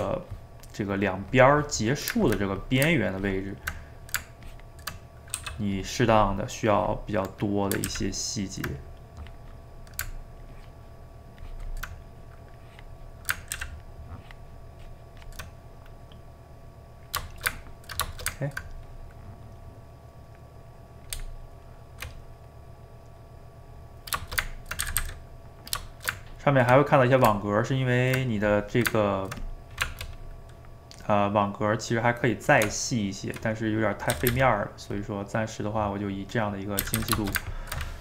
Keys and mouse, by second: 2.5 middle click, 3.2 ctrl+click, 3.8 middle click, 4.4 ctrl+click, 5.1 middle click, 5.3 f, 6.7-7.8 drag, 7.8 ctrl+z, 8.8-11.9 drag, 11.9 middle click, 12.5-13.6 drag, 13.6 ctrl+z, 13.8-15.5 ctrl+drag, 15.5-21.2 middle drag, 21.2 Tab, 22.5-24.2 right drag, 24.2 ctrl+shift+middle click, 24.8 a, 25.0 a, 25.1 middle click, 25.9 shift+right click, 26.1-29.4 ctrl+middle drag, 29.4 click, 29.8 Tab, 30.8-32.7 middle drag, 32.7 Tab, 34.0 middle click, 34.1 a, 34.3 a, 35.0 click, 36.2 middle click, 36.8 a, 37.0 a, 37.2 ctrl+shift+middle click.